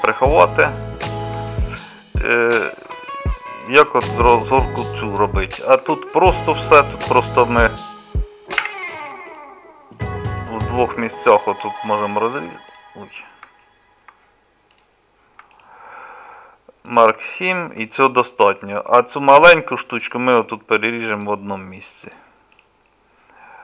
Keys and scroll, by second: 5.8 Tab, 8.6 2.